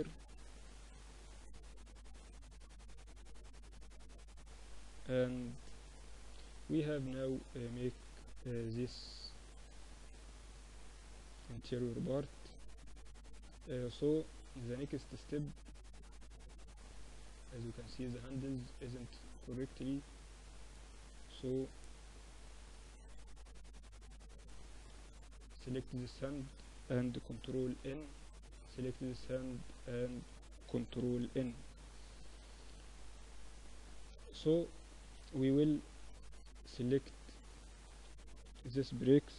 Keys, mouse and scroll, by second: 1.2 z, 2.2 z, 2.7 z, 3.0-5.4 middle drag, 5.8-7.7 middle drag, 10.4-16.2 middle drag, 16.2-20.2 right drag, 18.7-20.4 drag, 20.4-24.8 middle drag, 24.8 right click, 25.2 Tab, 25.5 a, 25.6 a, 26.4 ctrl+n, 26.9 Tab, 28.8 Tab, 29.0 a, 29.2 a, 30.0 ctrl+n, 30.2 Tab, 34.3 KP_1, 34.8 KP_3, 36.8-38.5 typing.